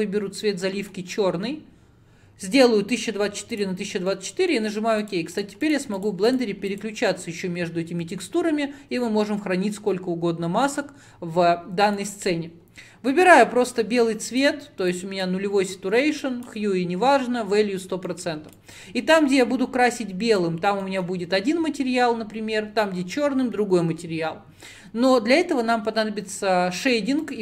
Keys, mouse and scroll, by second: 0.7 drag, 4.1 middle click, 5.1 click, 5.7 click, 6.3 click, 6.8-13.8 drag, 18.1-18.6 middle drag, 18.6-20.9 drag, 20.9 middle click, 21.2-26.3 scroll down 1.